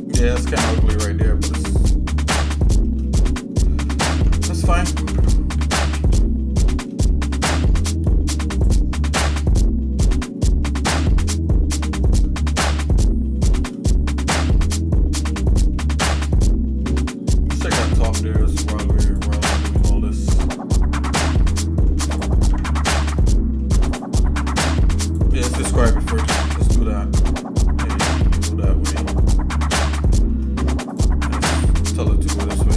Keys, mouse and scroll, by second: 1.5 shift+middle click, 2.1 scroll down 1, 2.1 scroll up 1, 2.1 scroll down 2, 2.6 shift+middle click, 3.0 shift+middle click, 3.6 shift+middle click, 4.1 Tab, 4.6 middle click, 5.1 Tab, 6.0 ctrl+s, 6.6 middle click, 7.1 shift+middle click, 8.8 click, 10.0 shift+middle click, 11.0 shift+middle click, 12.4 middle click, 12.9 shift+middle click, 13.9 middle click, 14.7 shift+middle click, 15.7 middle click, 16.5 shift+middle click, 19.1 click, 19.7 click, 20.4-20.7 scroll up 2, 21.1 Tab, 21.9 Tab, 22.1 click, 22.5 Tab, 23.2 shift+middle click, 23.9 click, 25.0 shift+click, 26.2 j, 28.0-29.1 shift+middle drag, 29.3-30.3 shift+middle drag, 30.9 click, 31.8 shift+click.